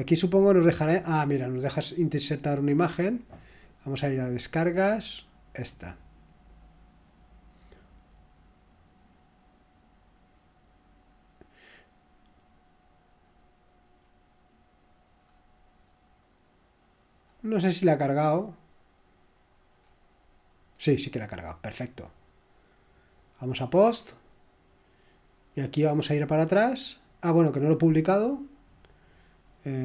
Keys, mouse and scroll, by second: 1.7 typing, 4.0 click, 4.5 typing, 5.2 click, 6.5 click, 7.5 typing, 11.5 typing, 14.1-14.6 scroll up 1, 15.2-15.8 scroll down 2, 17.3-18.4 scroll up 2, 19.9-20.7 scroll down 2, 20.7-21.1 scroll up 2, 22.2 click, 23.5 click, 25.0 click, 25.9 click, 27.7 click, 28.6-29.1 scroll up 2.